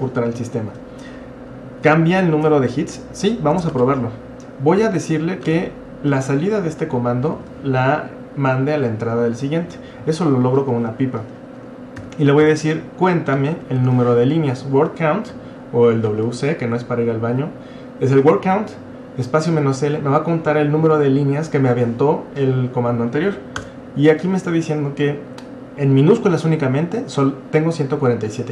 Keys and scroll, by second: 2.5 Up, 3.5 BackSpace, 3.7 space, 4.8 |, 5.5 space, 6.7 typing, 12.0-14.3 typing, 23.6 Return.